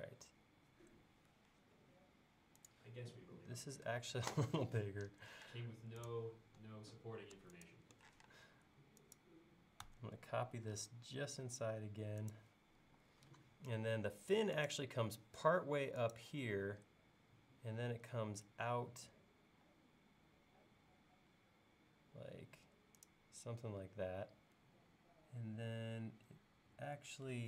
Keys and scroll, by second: 1.5 Up, 8.2 m, 12.9 l.